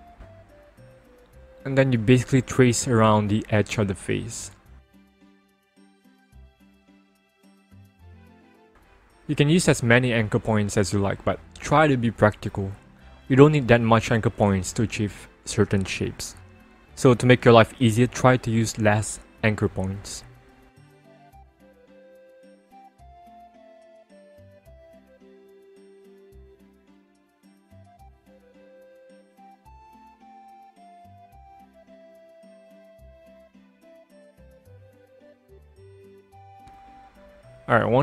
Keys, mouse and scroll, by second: 2.1 click, 4.8 click, 6.7 click, 9.0 click, 10.9 click, 13.9 click, 16.0 click, 18.6 click, 21.1 click, 24.2 click, 28.4 click, 31.1 click, 34.2 click.